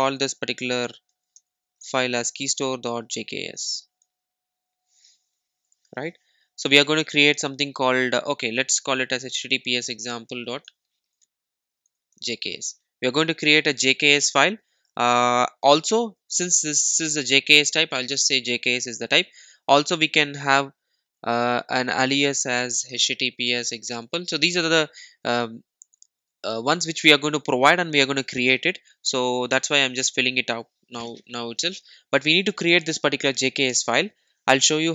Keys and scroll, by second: 14.0 super+s.